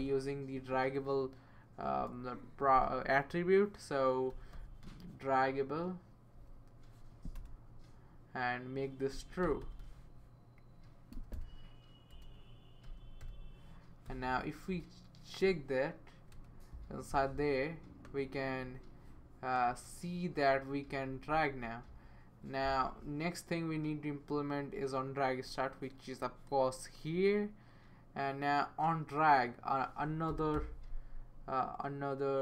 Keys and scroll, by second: 1.9 BackSpace, 4.1-5.3 typing, 6.3 BackSpace, 7.4 Return, 8.9-16.3 typing, 16.1 Tab, 30.0-31.0 typing.